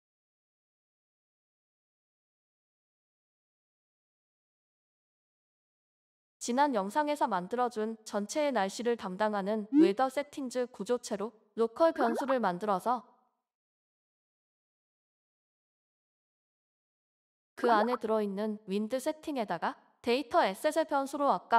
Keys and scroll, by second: 20.1 typing.